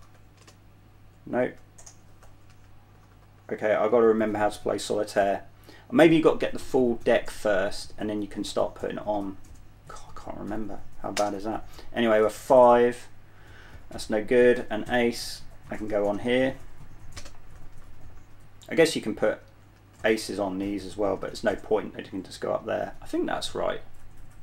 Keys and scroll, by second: 0.2-4.2 typing, 11.5 space, 14.4-16.5 typing, 17.5-22.1 typing.